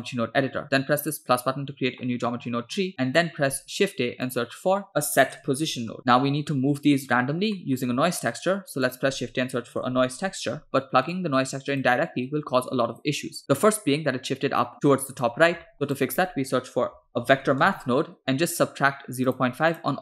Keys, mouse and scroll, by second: 1.0 click, 2.0 middle click, 2.4-2.9 scroll up 8, 2.9 middle click, 3.6 shift+a, 7.6 middle click, 8.0 shift+a, 12.3-13.2 drag, 13.4 middle click, 14.7 middle click, 14.9 click, 15.6 shift+a.